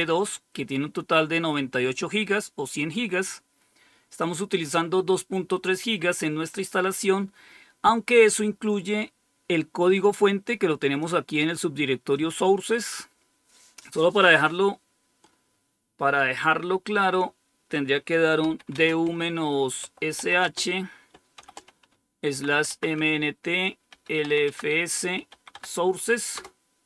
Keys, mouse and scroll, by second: 1.8 click, 3.3-4.6 drag, 9.7-11.0 drag, 12.0 click, 18.3-25.4 typing.